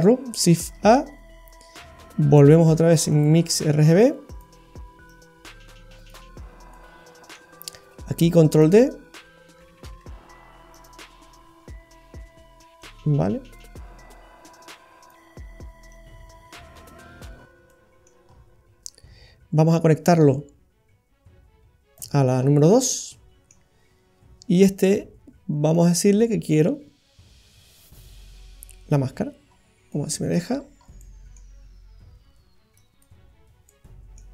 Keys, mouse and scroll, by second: 0.8 shift+a, 5.1 click, 6.7-7.9 scroll up 1, 7.9 middle click, 8.5 click, 9.9 shift+d, 11.1 scroll up 2, 11.2-12.0 scroll down 6, 12.8 click, 14.4 click, 15.9 click, 17.1-17.7 scroll up 6, 17.6 middle click, 18.2-18.5 scroll up 2, 19.8 click, 22.4-23.1 scroll down 3, 23.1 middle click, 25.7 click, 29.5-30.1 scroll up 2, 29.9 middle click, 30.3 middle click, 30.6-31.0 scroll up 4, 31.0 middle click, 32.7 click, 33.6 middle click.